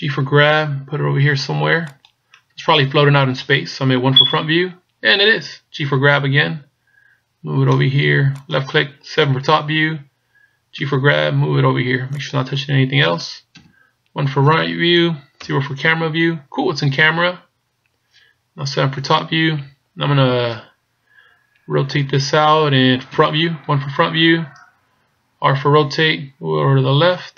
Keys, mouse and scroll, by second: 0.2 g, 4.2 KP_1, 5.8 g, 9.2 KP_7, 10.9 g, 13.5 KP_1, 15.4 KP_0, 19.0 KP_7, 23.1 KP_1, 26.0 r.